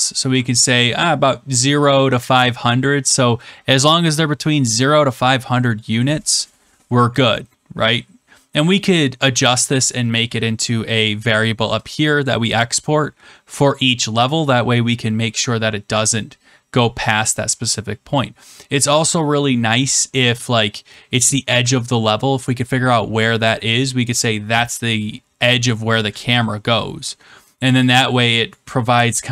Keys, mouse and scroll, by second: 0.0-0.5 typing, 11.1 click.